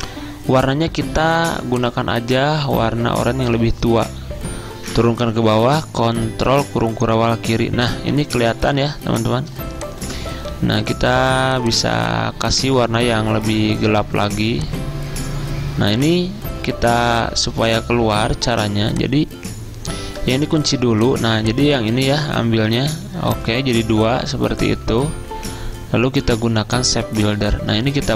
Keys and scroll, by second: 6.6 ctrl+[, 8.8 z, 13.6 z, 18.6 v, 20.7 ctrl+2, 22.3 ctrl+z, 25.0 ctrl+z.